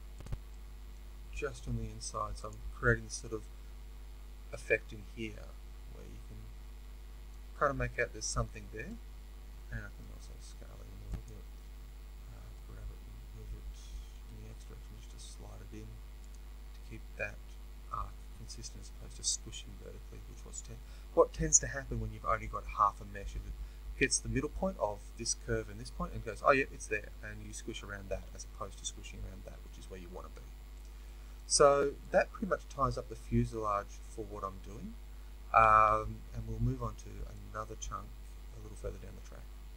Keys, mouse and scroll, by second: 0.1 click, 0.4-2.4 middle drag, 2.4 z, 2.8-12.3 middle drag, 7.4-7.8 scroll, 10.0 s, 12.3 g, 16.2 click, 30.6 middle click, 31.6-31.9 scroll, 31.9-38.8 middle drag.